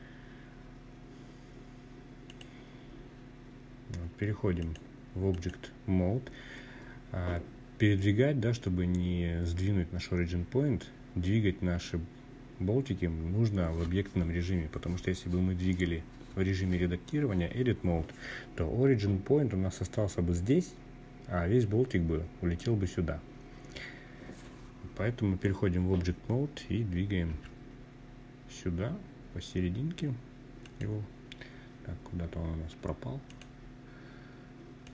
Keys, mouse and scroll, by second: 1.0 click, 3.3-4.3 drag, 6.2-7.2 scroll down 2, 9.8-10.6 scroll down 1, 10.6-12.6 scroll down 1, 26.0 g, 29.4 click, 32.0 click, 33.5 click, 34.6-34.9 scroll down 3.